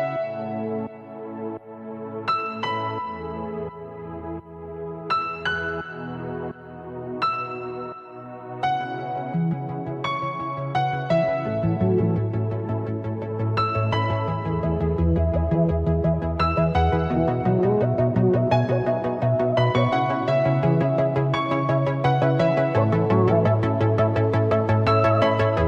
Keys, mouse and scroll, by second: 1.0 KP_7, 2.1-6.7 middle drag, 6.7 click, 7.7-11.4 drag, 14.8 click, 15.8 KP_1, 17.1 scroll up 3, 17.5-18.2 shift+middle drag, 18.2-18.8 scroll up 1, 18.8 click, 19.8-23.4 drag.